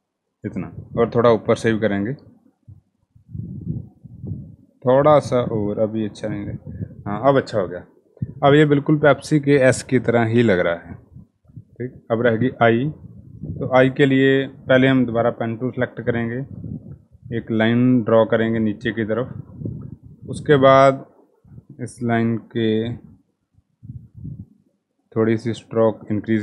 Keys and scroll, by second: 13.5 p, 17.1 Escape.